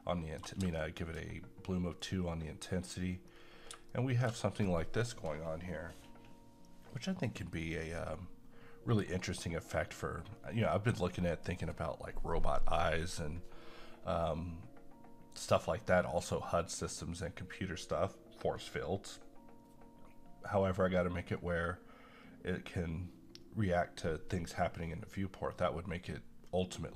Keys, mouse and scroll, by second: 0.8 middle click, 2.0-3.3 drag, 3.3-3.7 scroll down 1, 3.9-13.9 middle drag.